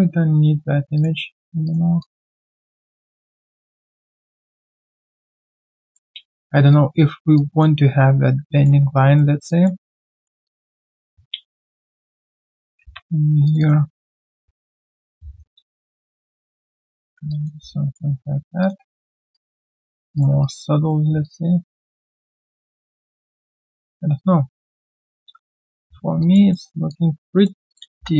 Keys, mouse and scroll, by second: 2.0 alt+click, 2.5 alt+click, 2.9 alt+middle click, 3.1 alt+click, 4.9 alt+click, 5.8 alt+right click, 6.1 alt+click, 6.4 alt+middle click, 6.7 alt+click, 7.1 alt+right click, 7.3 alt+click, 8.5 alt+click, 8.8 alt+right click, 10.1 double click, 10.4 alt+click, 11.0 alt+w, 13.6 double click, 14.7 ctrl+shift+click, 17.3 alt+click, 17.5 alt+q, 17.6 right click, 18.1-18.5 scroll down 1, 18.6 alt+click, 19.3 alt+click, 19.7 alt+right click, 19.7 click, 23.8 alt+middle click, 24.1 alt+click, 24.8 alt+right click, 25.1 alt+click, 25.4 alt+middle click, 26.2 alt+click, 26.5 alt+middle click, 26.9 alt+click, 28.1 1.